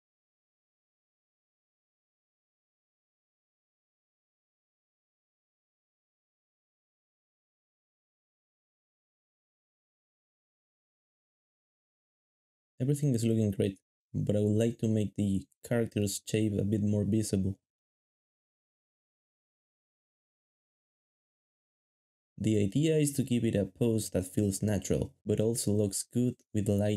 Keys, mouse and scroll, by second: 3.9 shift+middle click, 4.0 alt+a, 4.2 alt+shift+z, 4.4 alt+shift+z, 5.6-8.2 typing, 10.2 3, 11.2 alt+shift+z, 11.5 alt+shift+z, 11.9 alt+shift+z, 12.9 alt+shift+z, 13.3 alt+shift+z, 13.5 alt+shift+z, 13.7 alt+shift+z, 14.7 alt+shift+z, 14.8 alt+shift+z, 17.4 ctrl+b, 18.1 shift+middle click, 18.7 shift+middle click, 19.1 ctrl+Tab, 19.9 g, 20.8 ctrl+Tab, 21.2-23.4 typing, 21.9 shift+middle click, 24.5 ctrl+Tab, 24.8 shift+middle click, 24.9 g, 25.4 g, 26.0 ctrl+Tab, 26.2 g.